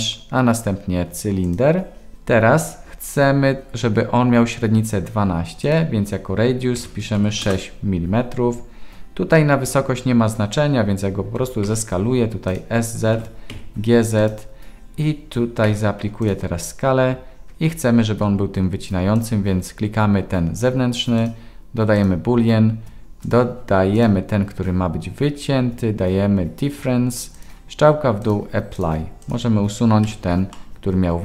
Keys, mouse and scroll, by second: 5.6-8.4 drag, 7.3 m, 11.4 s, 13.1 g, 15.6 ctrl+a, 21.2-22.0 drag, 23.2 click, 27.3-28.3 drag, 30.0 Delete, 30.5-31.2 middle drag.